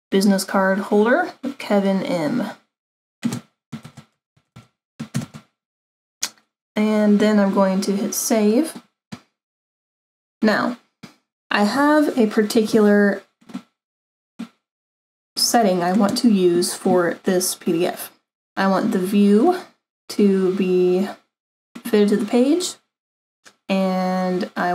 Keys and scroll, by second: 3.8-5.1 typing.